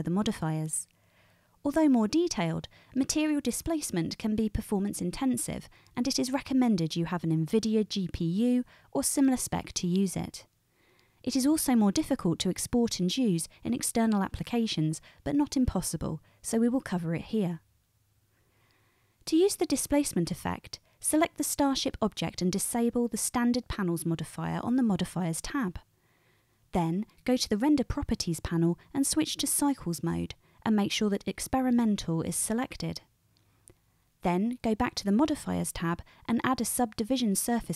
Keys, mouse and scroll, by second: 17.9-24.6 middle drag, 24.6 click, 24.7-28.4 middle drag, 28.4 click, 28.6-29.5 middle drag, 29.5-35.6 drag, 35.6-37.0 middle drag, 37.0-37.7 drag.